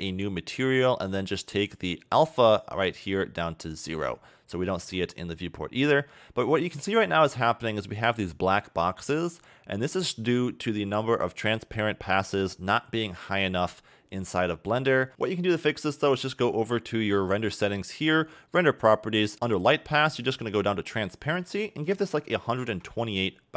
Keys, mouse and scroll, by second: 0.1 click, 0.8-1.7 scroll down 11, 2.4-3.1 scroll down 2, 3.1 click, 4.7 a, 4.8 a, 6.4 scroll up 2, 6.9 shift+middle click, 8.0 scroll up 1, 12.8 scroll down 1, 13.6 scroll down 1, 15.1-16.1 scroll up 1, 19.5 click, 20.0-20.4 scroll down 2, 21.3 click.